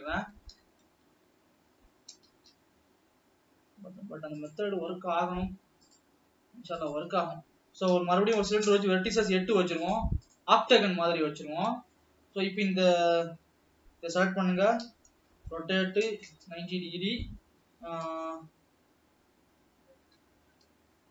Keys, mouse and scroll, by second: 1.4 shift+s, 3.1 shift+a, 6.3-10.6 drag, 12.1 scroll down 1, 12.4-13.4 middle drag, 13.4 alt+a, 13.6 l, 15.1 r, 18.6 g.